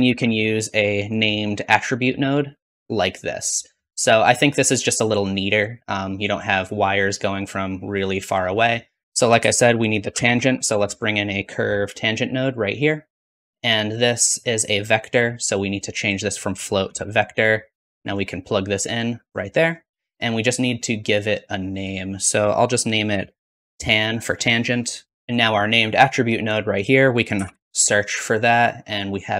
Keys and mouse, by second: 5.1-9.0 drag, 9.0 ctrl+x, 9.0-10.2 shift+middle drag, 9.3 shift+a, 14.1-16.0 drag, 26.9-29.3 drag.